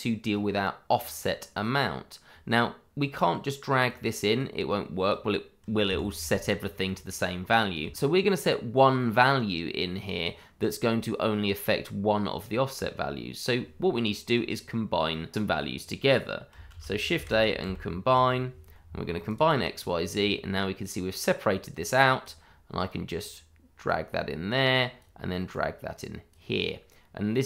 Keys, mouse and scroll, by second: 0.3 click, 3.8 click, 5.8 Escape, 7.9 click, 16.6-18.2 typing, 19.2 click.